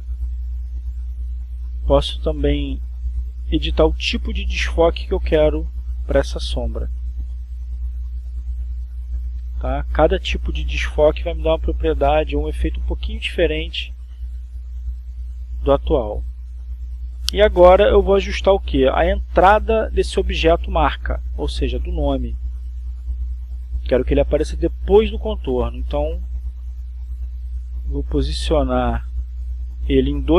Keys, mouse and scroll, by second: 5.0 click, 6.6-7.5 drag, 10.7 click, 13.2 click, 15.8 click, 20.1-27.2 drag, 27.6 click, 29.6 click.